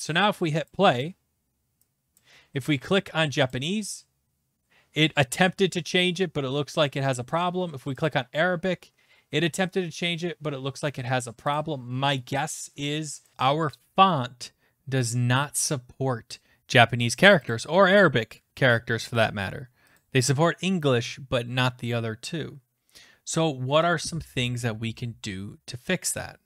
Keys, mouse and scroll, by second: 0.7 click, 1.6-2.4 typing, 2.2 click, 3.5 click, 8.0 click, 11.5 click, 12.3 click, 13.2 click, 17.5 click, 19.9 click.